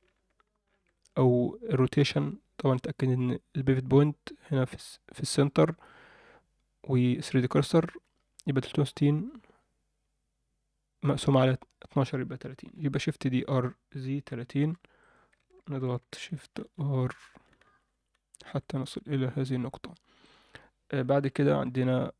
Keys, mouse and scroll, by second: 12.8 shift+d, 16.0-18.5 shift+r, 19.4 Tab, 19.7 Tab, 20.2 click, 21.2 ctrl+l.